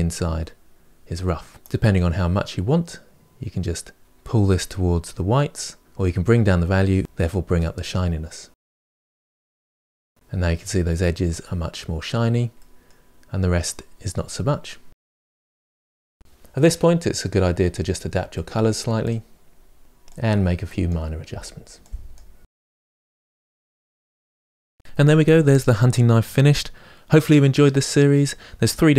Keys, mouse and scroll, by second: 1.5 scroll up 1, 1.7-3.1 drag, 5.9 click, 8.7 click, 11.3-15.1 middle drag, 15.1 scroll down 3, 15.4-16.7 middle drag, 16.7 click, 17.1 shift+middle click, 17.2 scroll up 1, 17.3 shift+middle click, 17.5 click, 18.3 middle click, 18.6 click, 19.4 middle click, 20.0-20.3 scroll down 5, 20.3 click, 21.0-21.3 scroll down 5, 21.3 click, 22.3 click, 22.8 middle click, 23.0 scroll down 2, 23.3 shift+middle click, 23.7 scroll down 1, 23.8 middle click, 25.3-26.5 middle drag.